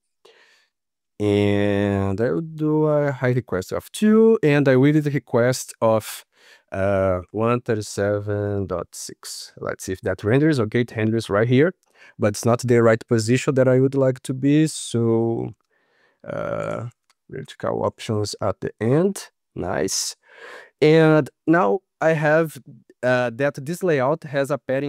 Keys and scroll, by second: 9.9 ctrl+s.